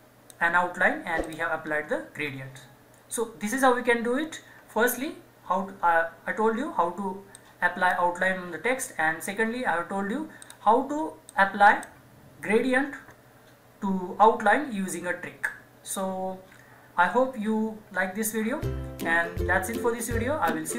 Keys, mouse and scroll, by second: 1.6-2.3 scroll up 1, 7.4-14.3 drag.